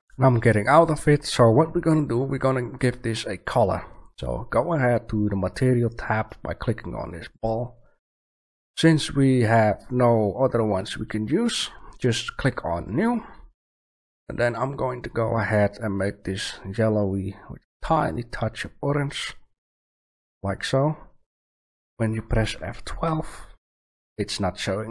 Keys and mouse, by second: 7.2-9.3 drag, 9.7-11.7 drag, 12.8-13.8 drag.